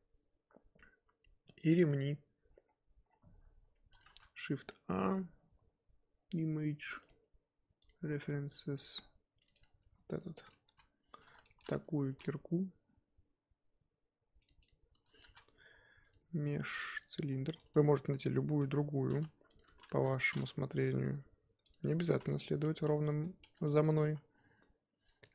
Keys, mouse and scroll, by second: 2.5-3.0 scroll up 4, 3.0-5.7 scroll down 1, 10.6 g, 11.4 shift+middle click, 11.6-12.1 scroll up 5, 12.1 r, 14.6 click, 14.8 scroll up 2, 17.0 shift+a, 17.2-18.2 scroll down 6, 19.9-20.9 drag, 20.9 g, 21.7 scroll up 7, 22.0 z, 22.6-22.9 scroll up 4, 22.9 g, 23.9 Tab, 24.0 s.